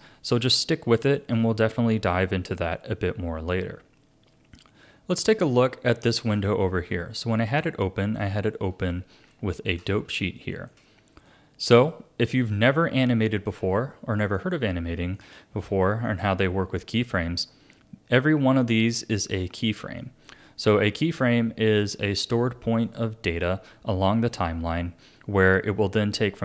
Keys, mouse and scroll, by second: 0.6-3.6 shift+middle drag, 3.6 Tab, 4.6 Tab, 6.1-8.3 drag, 8.3 a, 8.9-9.9 shift+middle drag, 9.9 a, 10.4 shift+middle click, 11.3-12.6 drag, 12.6 a, 13.5 a, 13.9-15.4 middle drag, 15.4-15.8 scroll up 1, 15.8-19.0 shift+middle drag, 19.4-20.0 scroll up 5, 20.0-22.1 middle drag, 22.1 click, 22.8 click.